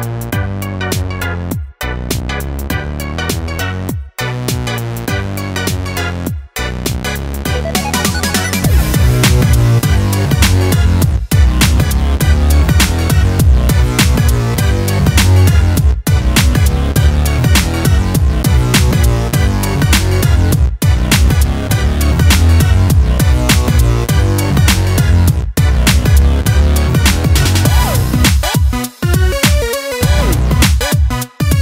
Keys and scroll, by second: 0.2-2.6 typing, 4.0-6.0 typing, 8.7-9.9 typing.